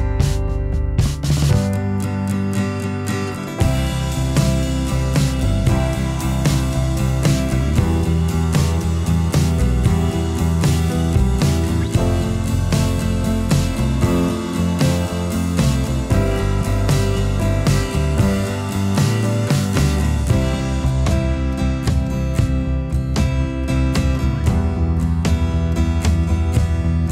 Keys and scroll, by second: 16.4 ctrl+b.